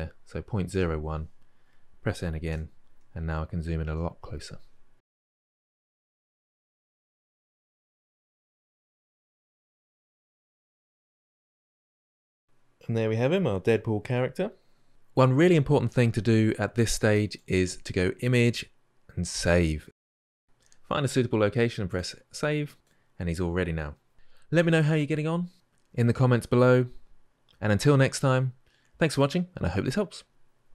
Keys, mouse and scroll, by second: 0.5 click, 2.3 n, 3.0-4.6 ctrl+middle drag, 4.6 click, 4.9 middle click, 5.1 click, 5.3 ctrl+middle click, 5.8 ctrl+middle click, 5.9 click, 6.2 shift+middle click, 6.6 click, 7.0 ctrl+middle click, 7.7 ctrl+shift+middle drag, 8.0-8.4 drag, 9.4-10.3 drag, 10.5 ctrl+middle click, 11.2 middle drag, 11.3 click, 11.7-12.7 ctrl+shift+middle drag, 14.9-20.4 middle drag.